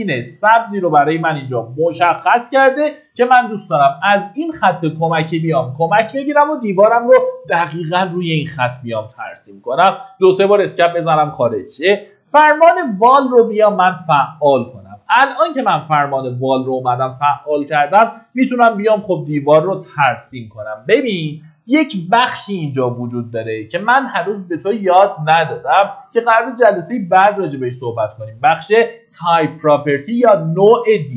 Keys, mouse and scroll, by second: 9.0 Escape, 12.3-13.2 typing, 16.5-17.1 scroll down 1, 17.8 middle click, 18.9 click, 21.0 Escape.